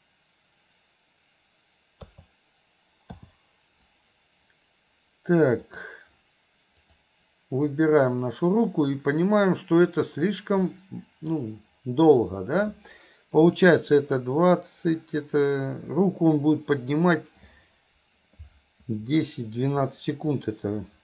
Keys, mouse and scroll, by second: 2.2 a, 3.3 i, 5.6 click, 7.0 click, 7.8 click, 10.7-11.3 drag, 20.4-21.0 drag.